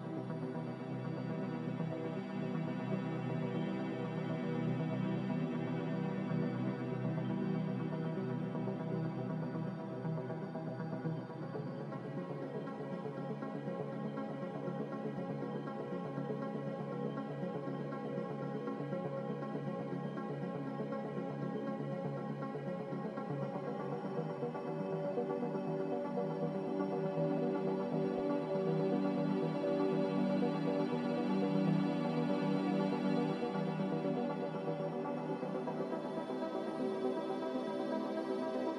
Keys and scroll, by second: 3.7 z, 15.6 a, 23.6 g, 31.3 ctrl+z, 31.9 ctrl+z.